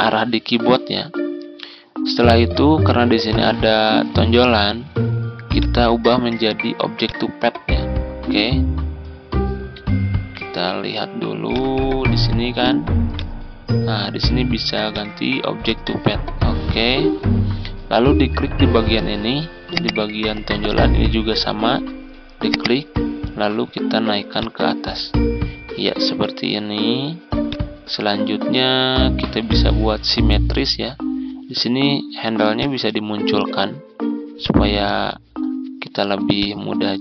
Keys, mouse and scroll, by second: 1.5 ctrl+scroll down 1, 4.0 ctrl+scroll up 1, 5.4 click, 10.0 ctrl+z, 11.4-37.0 drag.